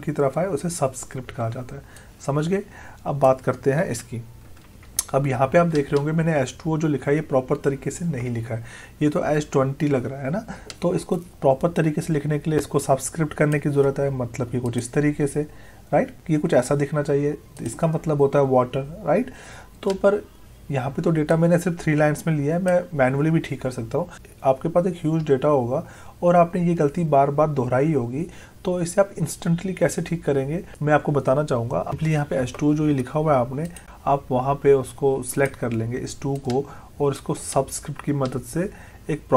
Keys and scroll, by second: 3.9 Delete.